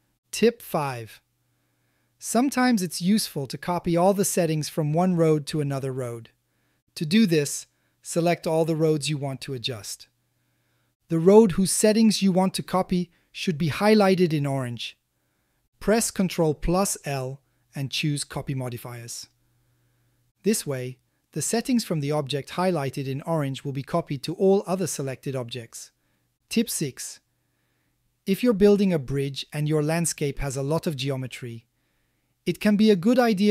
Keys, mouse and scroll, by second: 17.8 ctrl+l, 21.8 a, 22.0 a, 27.1-27.5 shift+middle drag, 27.5 shift+click, 27.8 click, 28.3-30.3 ctrl+middle drag, 30.6-31.3 shift+middle drag, 31.5-33.5 middle drag.